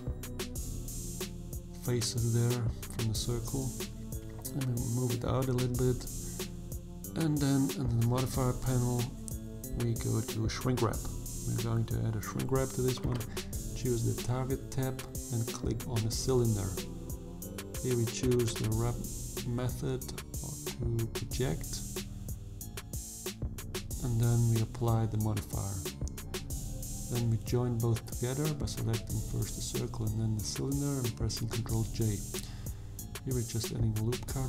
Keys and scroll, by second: 0.3 shift+z, 1.4 g, 1.8 x, 24.5 ctrl+j, 27.0 Tab, 29.2 3, 32.1 ctrl+r, 32.5 ctrl+b.